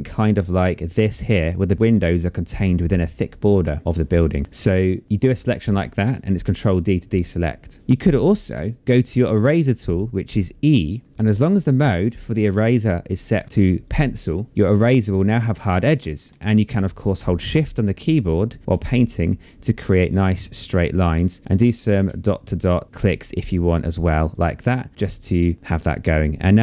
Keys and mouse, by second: 3.2 click, 4.6 click, 5.7 ctrl+d, 9.6 e, 12.1 click, 13.4 click, 14.5 click, 16.4 click, 19.4 click, 20.4 shift+click, 22.5 shift+click, 23.7 shift+click, 24.8 shift+click.